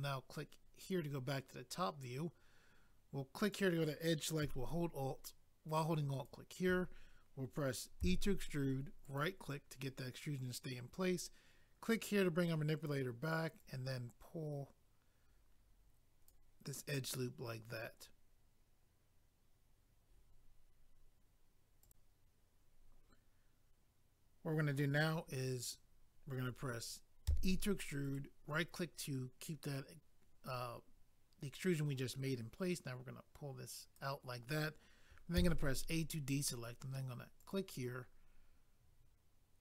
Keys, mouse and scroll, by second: 0.8 click, 0.9 click, 3.4 click, 3.5 click, 6.1 alt+click, 6.2 alt+click, 9.0 right click, 9.2 right click, 11.8 click, 11.9 click, 13.6 click, 21.8 click, 25.7 click, 25.7 click, 28.0 right click, 28.2 right click, 32.7 click, 35.4 a, 37.4 click, 37.5 click.